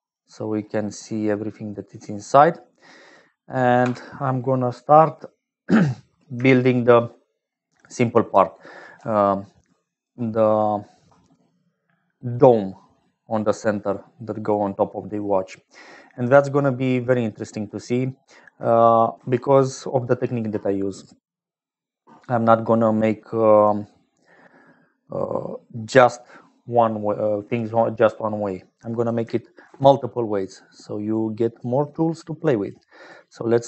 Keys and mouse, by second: 1.6 click, 2.8 click, 3.7 n, 9.4-11.0 drag, 9.4-9.9 d, 11.0 d, 11.1-15.3 drag, 14.8-15.2 d, 15.3 middle click, 16.3 d, 17.4 middle click, 19.1 shift+a, 29.6 shift+a.